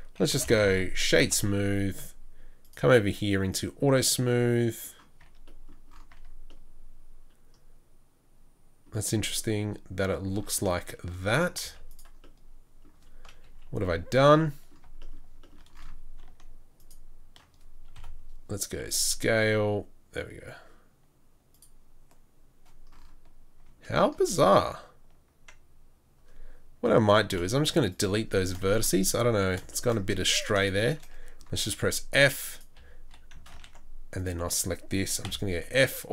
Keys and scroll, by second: 0.7 o, 5.2 Tab, 6.1 Tab, 9.0 Tab, 11.6 z, 13.4 KP_3, 17.9 KP_7, 18.8 KP_7, 19.3 s, 27.3 Delete, 29.2 2, 31.7 f, 32.8 f, 33.5 ctrl+z, 35.2-36.1 f.